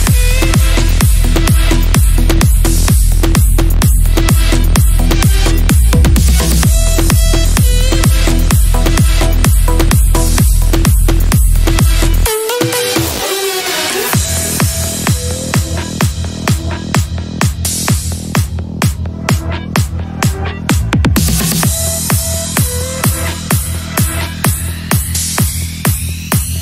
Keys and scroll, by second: 1.7 shift+F2, 2.1 F3, 5.4 ctrl+z, 6.2 ctrl+z, 7.2 ctrl+z, 7.5 ctrl+z, 11.9 F3, 12.3 Escape, 14.2 shift+F2, 14.3 F3, 24.4 ctrl+g.